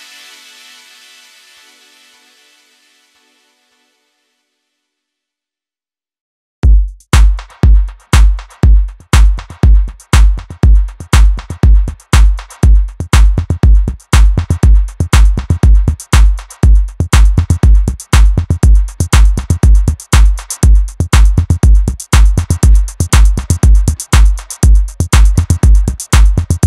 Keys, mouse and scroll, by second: 0.5 click, 1.3 click, 3.4 click, 4.2 click, 5.6 KP_1, 6.5 Tab, 6.7-7.3 scroll down 3, 7.3-8.9 shift+middle drag, 8.9 scroll down 1, 9.1 KP_1, 9.6-12.7 shift+middle drag, 12.7-13.0 scroll up 2, 13.0-13.5 shift+middle drag, 13.5-14.9 scroll up 2, 14.9 Tab, 15.5 click, 19.2 click, 20.7 click, 22.4 middle click, 23.0 KP_1, 23.7 shift+middle click, 24.4 r, 25.8 scroll down 1, 26.0 Tab, 26.5-26.6 middle drag.